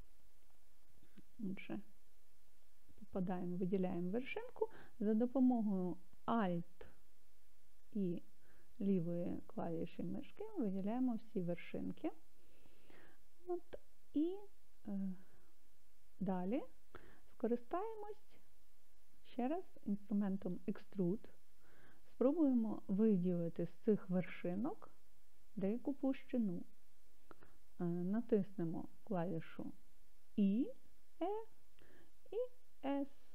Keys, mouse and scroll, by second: 2.5 click, 9.1 alt+click, 30.4 e, 33.2 s.